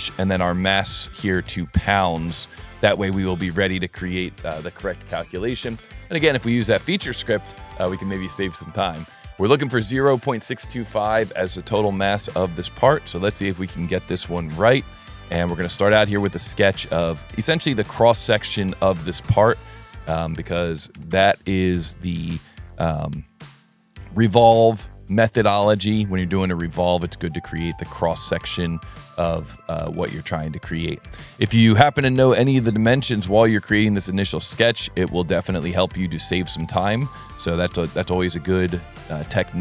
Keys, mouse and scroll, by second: 0.5 right click, 1.0 right click, 2.3 click, 3.5 click, 5.2 click, 6.2 click, 6.6 click, 7.1 click, 7.4-8.5 drag, 8.8 click, 9.0 click, 9.5 click, 10.8 click, 12.5 click, 12.8 s, 13.6 click, 15.2 s, 16.0 click, 17.0 click, 19.7 click, 22.6 click, 25.9 click, 27.1 click, 28.4 click, 31.2 click, 32.7 click, 34.9 click, 36.3-37.4 drag, 37.9 s, 39.1 click.